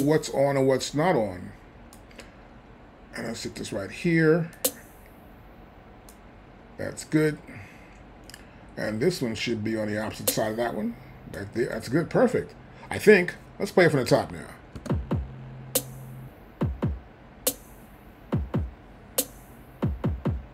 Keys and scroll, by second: 14.8 space.